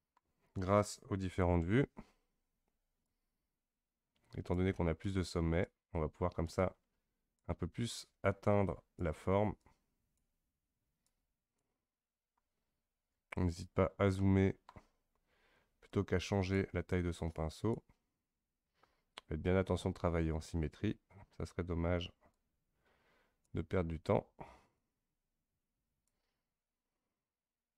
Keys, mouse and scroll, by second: 1.3 KP_1, 3.0-12.6 drag, 12.6-14.2 scroll up 2, 14.2 shift+middle click, 15.0-15.9 scroll up 1, 15.9-20.2 drag, 22.3-27.7 drag.